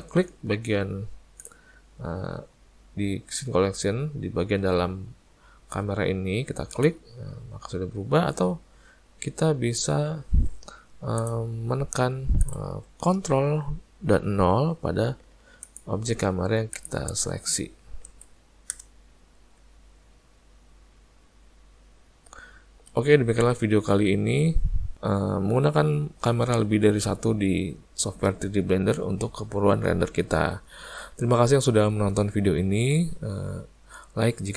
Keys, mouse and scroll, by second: 1.4 click, 6.8 click, 11.8 `, 15.7 click, 16.8 click, 18.8 ctrl+KP_0, 23.7 `, 26.3 click, 29.4 `, 32.6 ctrl+KP_0.